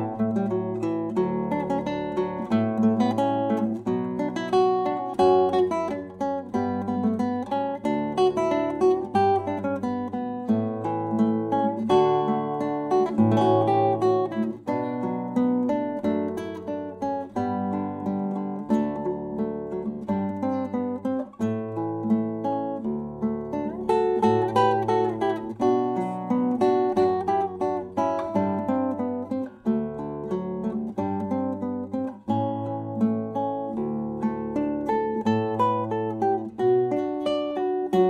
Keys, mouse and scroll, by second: 2.0 s, 3.7-5.7 drag, 5.8 s, 8.9 Tab, 13.5 ctrl+r, 16.3 Escape, 17.4 Tab, 19.3 s, 22.5-24.6 drag, 24.5 Tab, 24.7 click, 28.1-30.3 drag, 35.7-38.0 right drag, 37.0-38.0 drag.